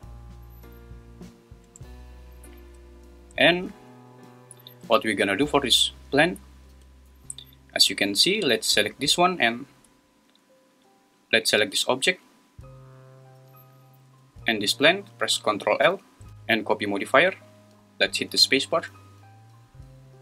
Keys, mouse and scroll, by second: 1.7 space, 7.1 Escape, 12.1 Escape, 18.3 space.